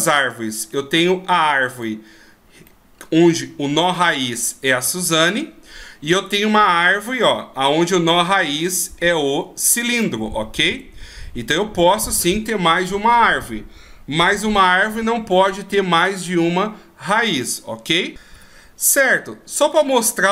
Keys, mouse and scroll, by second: 1.7 right click, 2.7 middle click, 7.1 r, 9.9 right click, 13.9 r, 14.9-15.8 scroll up 4, 15.8 scroll down 1, 15.9-16.2 scroll down 1, 20.1-20.3 scroll up 1.